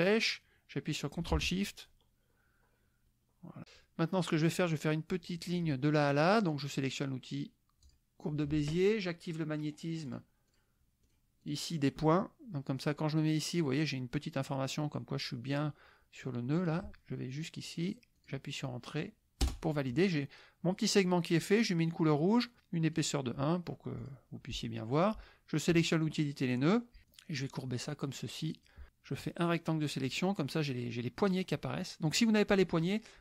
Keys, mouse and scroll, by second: 7.8 click, 10.1 click, 10.5 click, 11.1 click, 11.4 click, 16.6 click, 18.2 click, 19.4 Return, 22.5 click, 24.0 click, 25.7 click, 26.1 click, 27.1-28.8 drag, 29.2 click, 31.2-32.3 drag.